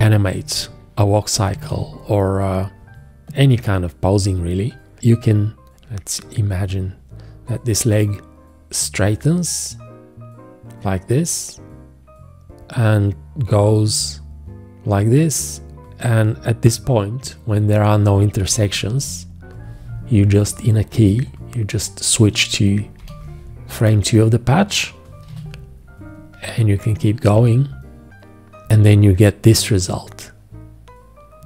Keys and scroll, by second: 0.3 v, 1.3-2.2 typing, 5.7 g, 18.5 v, 23.0 shift+., 25.3 g.